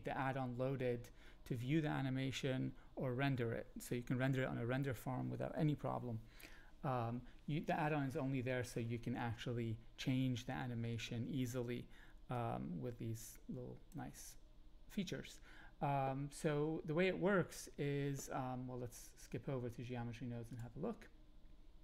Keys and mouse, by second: 12.3-13.9 drag, 20.5 click.